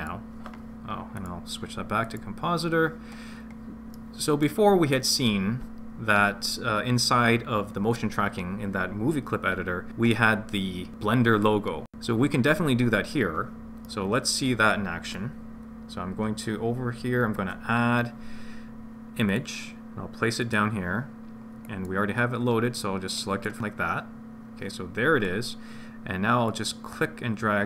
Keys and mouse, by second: 1.2 click, 3.9 middle click, 13.8 middle click, 21.6-23.6 drag, 26.5 click, 26.8-27.6 drag.